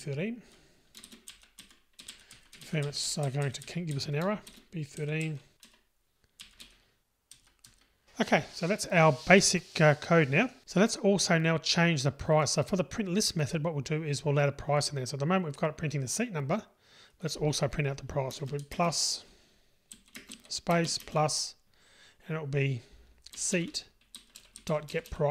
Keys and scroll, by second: 1.3 Delete.